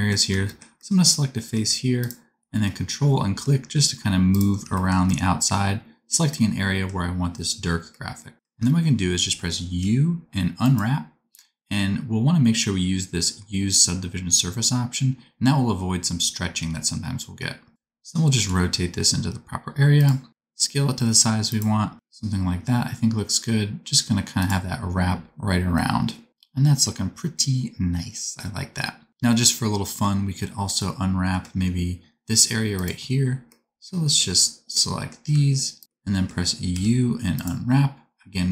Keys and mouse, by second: 1.0 middle click, 1.9 ctrl+click, 2.0-4.3 ctrl+middle drag, 5.8-7.6 middle drag, 9.7 u, 12.9 click, 13.4 middle click, 16.5 r, 18.3 g, 20.3 s, 21.9 g, 32.3 3, 33.8 middle click, 35.0 ctrl+middle click, 35.7 ctrl+click, 35.8-38.5 ctrl+middle drag, 36.6 u.